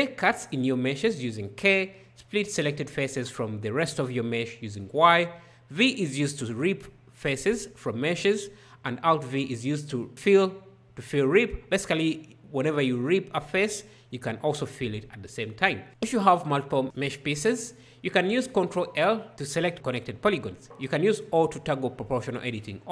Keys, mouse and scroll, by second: 0.2 k, 2.2 y, 5.9 v, 8.7 alt+v, 15.9 ctrl+l, 21.1 o.